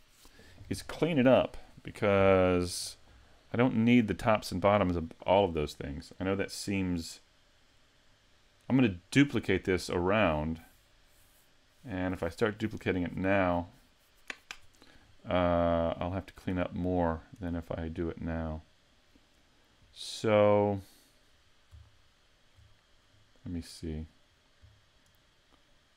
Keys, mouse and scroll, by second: 15.9-17.4 scroll down 8, 16.9 middle click, 17.4-18.0 scroll up 4, 18.0 middle click, 21.9 shift+middle click, 23.1-23.7 scroll down 1, 23.7 middle click, 24.3-24.7 scroll down 3, 24.7 middle click.